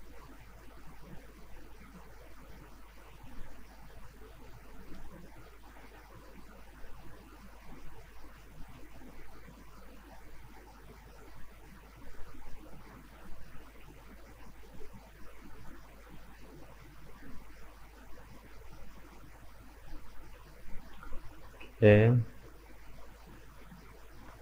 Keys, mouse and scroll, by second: 0.2 middle click, 1.0 right click, 1.3 Tab, 1.6-4.6 middle drag, 4.6-5.1 scroll up 1, 5.1-7.6 middle drag, 7.6-8.1 scroll down 2, 8.1-9.3 middle drag, 9.3 click, 9.7-10.1 scroll up 1, 10.1 middle click, 10.7-11.8 scroll up 2, 12.6 right click, 13.3-14.2 scroll down 5, 14.2-17.3 middle drag, 17.5 alt+right click, 18.6-19.0 scroll up 1, 19.0-20.5 middle drag, 20.5 right click, 20.8 scroll up 3, 21.1-23.9 middle drag, 23.9 right click.